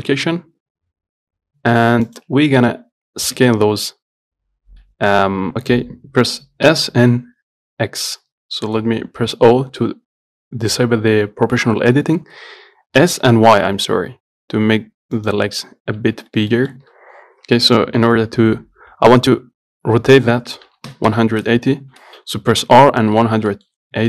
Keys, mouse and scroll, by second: 2.8-3.6 scroll up 2, 3.6 Tab, 12.1 o, 13.2 s, 15.7-16.8 scroll down 1, 16.8-18.3 shift+middle drag, 18.3 r, 23.5 scroll up 1, 23.8 shift+middle click.